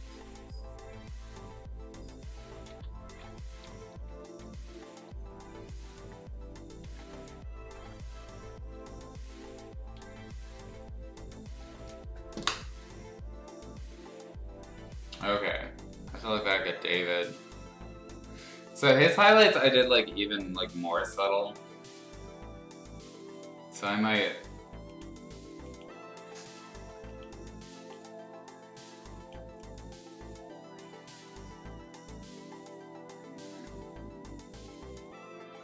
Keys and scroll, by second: 2.7 ctrl+z, 3.5 ], 4.1 ], 6.8 ctrl+z, 8.7 x, 9.9 x.